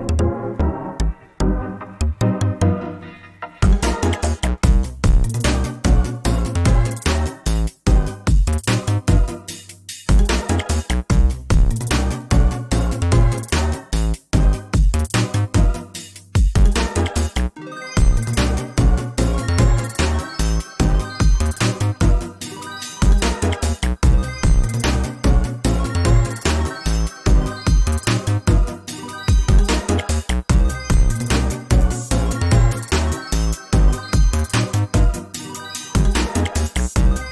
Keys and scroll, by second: 2.1 ctrl+space, 3.4 ctrl+z, 4.9 ctrl+a, 7.0 ctrl+space, 9.6 ctrl+z, 11.6 ctrl+space, 22.7 ctrl+s, 24.8 ctrl+space, 29.8 ctrl+space, 31.4 ctrl+space, 32.6 ctrl+space.